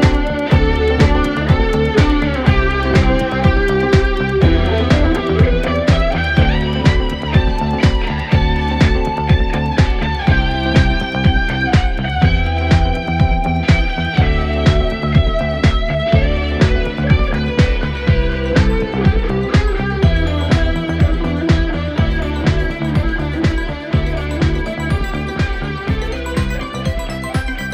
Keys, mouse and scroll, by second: 11.6-12.5 drag, 17.6 right click, 20.8 click.